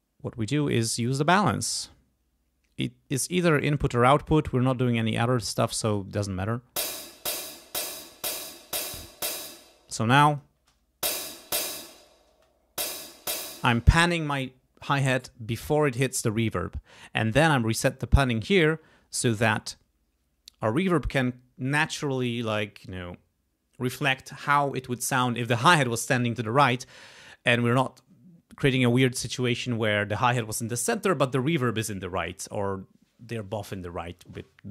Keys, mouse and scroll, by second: 4.6-6.1 drag, 6.3 space, 7.1-9.1 drag, 9.4 space, 10.3 click, 10.6 space, 11.7 space, 12.0 click, 13.4 space, 15.7 click.